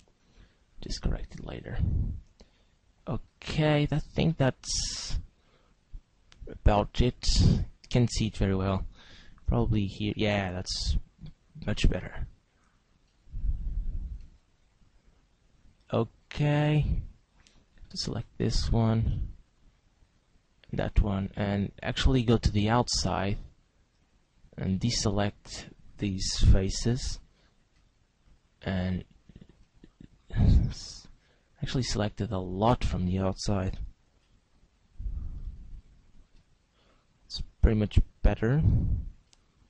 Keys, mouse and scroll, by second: 0.5 shift+right click, 1.6 shift+right click, 2.4 shift+right click, 3.2 shift+right click, 4.4 middle click, 7.2 shift+right click, 8.4 shift+middle click, 9.4 z, 10.8 shift+right click, 11.7 middle click, 13.1 shift+middle click, 14.2 middle click, 17.0 middle click, 18.0 shift+right click, 19.2 middle click, 20.3 shift+right click, 21.0 middle click, 22.5 middle click, 25.0 shift+right click, 26.6 c, 28.5 right click, 28.6 middle click, 29.6 shift+middle click, 30.6 middle click, 33.8 c, 36.8 right click, 38.0 shift+right click.